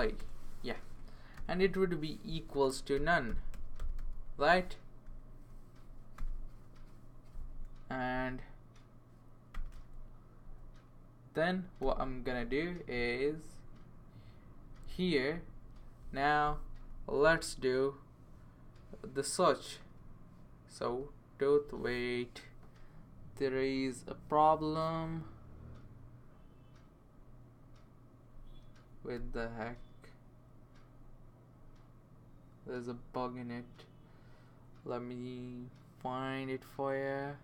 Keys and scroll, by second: 0.2 Return, 1.1 typing, 2.5-4.5 typing, 5.0 Right, 6.2 ;, 7.9 Down, 8.1 Down, 9.5 ;, 10.4 Down, 11.8 ;, 19.8 t, 20.8 o.